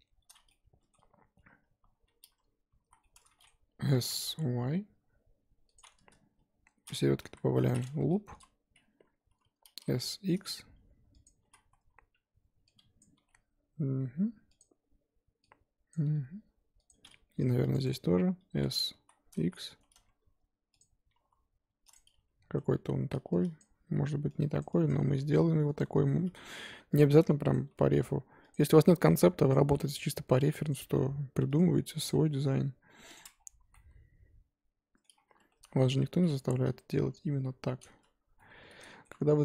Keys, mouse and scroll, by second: 0.5-2.0 middle drag, 2.0 a, 2.9 z, 3.0 middle click, 3.9 s, 7.2 ctrl+r, 8.3 KP_1, 9.7 s, 11.5 z, 13.0 click, 13.2 g, 15.9 click, 16.0 g, 17.3 ctrl+r, 18.9 s, 21.1 g, 22.1 Tab, 22.5 Tab, 23.6 click, 24.7 click, 25.2 g, 26.0 g, 27.5 click, 27.6 g, 29.5 click, 29.7 g, 30.8 g, 32.1 click, 32.1 g, 33.3-33.7 scroll down 4, 33.7 z, 33.7-35.1 middle drag, 35.1 scroll up 2, 35.4 2, 35.9 alt+click, 36.9 KP_3, 37.3 KP_1, 38.4 middle click, 39.3 KP_1.